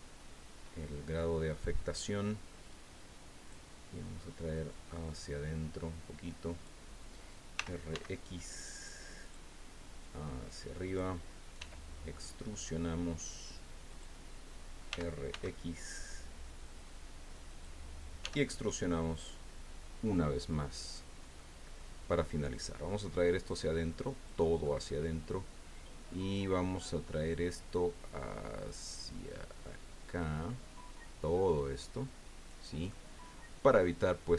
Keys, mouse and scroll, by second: 1.5 click, 2.7-3.7 drag, 4.7-6.8 drag, 7.5 r, 7.9 x, 9.2 click, 10.0-11.1 drag, 11.6 e, 13.9 click, 14.9 r, 15.3 x, 17.4 click, 18.2 e, 19.1 click, 20.5 click, 21.4 click, 22.9-24.5 drag, 24.6-26.2 drag, 27.3-28.8 drag, 28.8-29.4 scroll down 2, 30.0-30.6 scroll down 3, 30.9 scroll down 2, 32.9-34.0 drag.